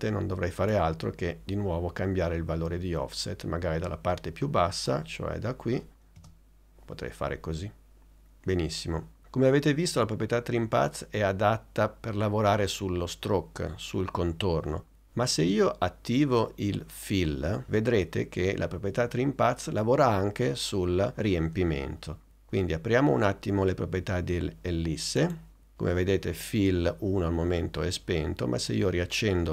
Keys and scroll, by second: 6.2 space.